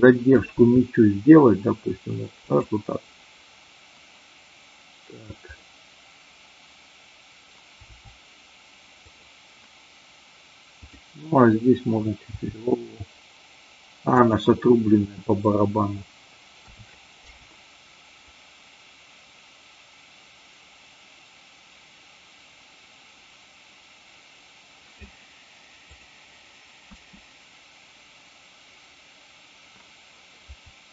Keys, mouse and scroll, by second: 0.5 r, 2.4 click, 5.4-6.3 drag, 7.8 r, 9.0 click, 12.3 r, 14.1 click, 16.5 a, 17.3 i, 18.1-24.9 drag, 25.8 click, 26.8 space.